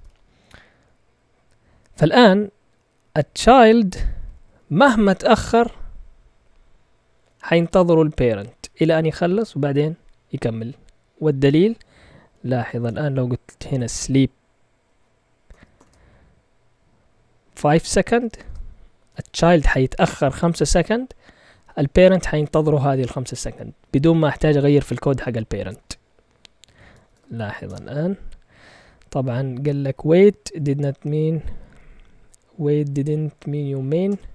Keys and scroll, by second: 0.0 ;, 3.9-4.5 typing, 9.8 typing, 10.5 Up, 12.2 End, 12.7 Return, 13.3-16.2 typing, 17.5-19.6 typing, 23.8 Up, 24.4 typing, 24.5 Up, 24.5 Up, 24.6 Up, 24.7 Up, 26.7 Escape, 26.7-27.6 typing, 34.0 Return.